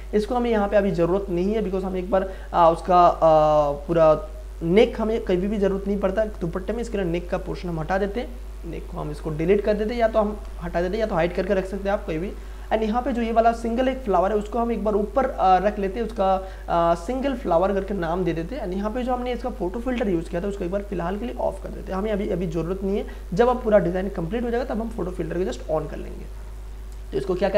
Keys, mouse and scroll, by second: 7.8 click, 10.4 Delete, 12.5-20.5 drag, 26.5 click.